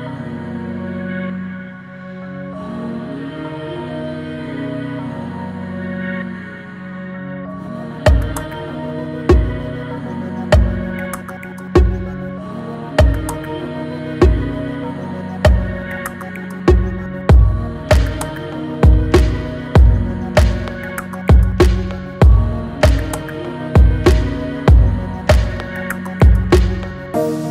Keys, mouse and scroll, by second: 0.7 scroll up 1, 1.2 Tab, 2.5 ctrl+scroll up 1, 2.7 click, 4.2 alt+click, 5.3 ctrl+b, 9.1 alt+e, 12.0 Tab, 12.4 scroll down 3, 12.9-13.6 middle drag, 13.6 scroll up 1, 16.6 scroll down 2, 18.3 scroll down 7, 18.5-21.2 middle drag, 21.2 alt+z, 22.3 alt+z, 22.7 click, 23.2-23.5 scroll down 1, 23.5-24.9 middle drag, 24.9-25.6 scroll down 2, 25.6-27.5 shift+middle drag.